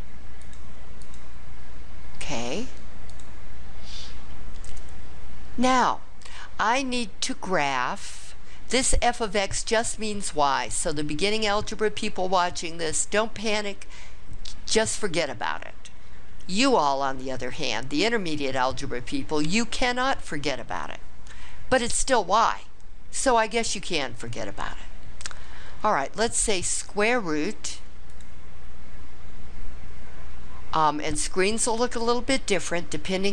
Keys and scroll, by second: 0.4 Up, 1.0 Up.